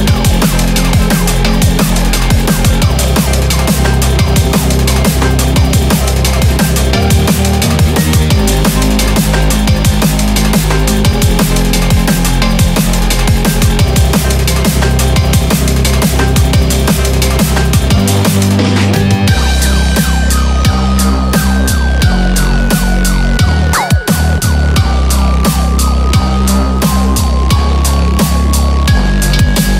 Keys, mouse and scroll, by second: 0.5 g, 2.1 click, 2.1 g, 3.6 click, 3.6 g, 3.8 g, 5.2 click, 5.2 g, 5.3 g, 6.6 click, 6.6 g, 6.7 g, 8.6 click, 8.6 g, 8.7 g, 10.3 click, 10.3 g, 10.5 g, 12.3 click, 12.3 g, 13.7 click, 13.8 g, 15.4 click, 15.4 g, 16.7 click, 16.9 g, 18.5 click, 18.5 g, 18.7 g, 20.3 click, 20.3 g, 20.4 g, 21.9 click, 21.9 g, 22.0 g, 23.3 click, 23.3 g, 23.3 g, 24.6 click, 24.8 g, 26.3 click, 26.3 g, 26.4 g, 27.6 click, 27.6 g, 29.5 5.